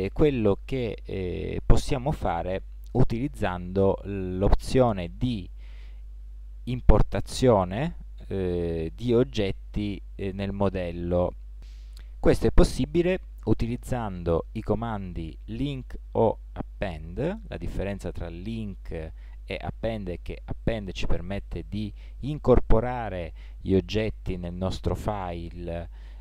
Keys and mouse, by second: 5.7-6.7 drag.